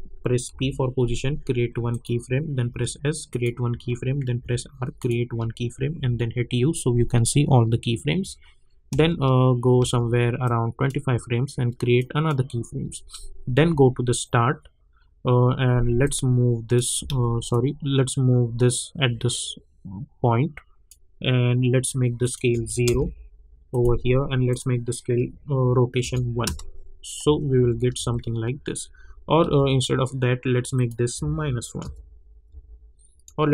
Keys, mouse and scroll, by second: 0.2-1.0 typing, 1.9 click, 2.7 s, 3.3 click, 4.4 r, 5.0 click, 5.9 u, 8.9 space, 10.4-11.9 drag, 13.6 j, 16.0 click, 17.0 ctrl+z, 17.5-22.2 drag, 22.8 Return, 23.7 click, 26.0 Return, 26.4 space, 29.0 j, 29.4 j, 30.7 click, 32.5 -.